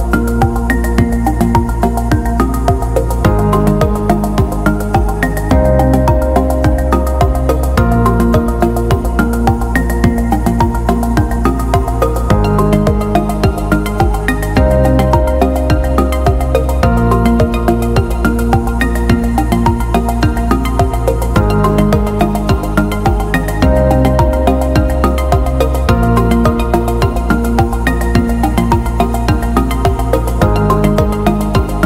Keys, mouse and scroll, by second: 0.0-2.5 typing, 18.5 click.